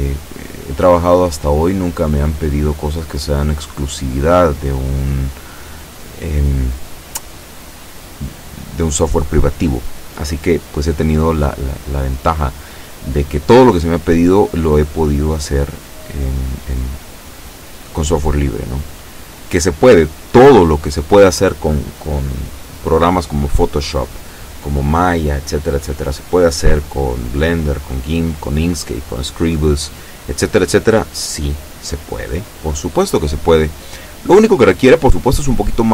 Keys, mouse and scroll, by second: 1.1-3.4 drag, 4.5-11.2 drag, 14.3-21.3 drag, 34.6 b.